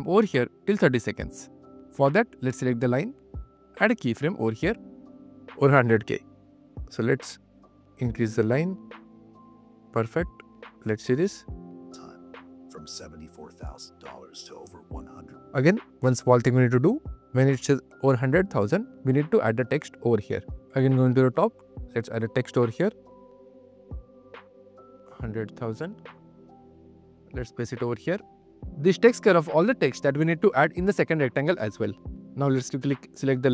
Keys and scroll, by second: 23.7 1, 24.1 0, 25.0 0, 25.5 0.